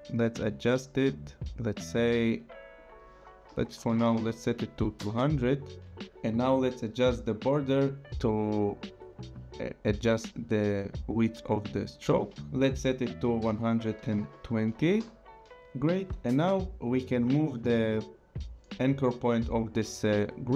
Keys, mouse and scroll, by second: 3.5 click, 3.9 KP_2, 4.0 KP_0, 5.0 Return, 7.1 click, 13.0 click, 13.4 KP_1, 14.0 KP_2, 14.2 KP_0, 14.9 Return, 17.3 click.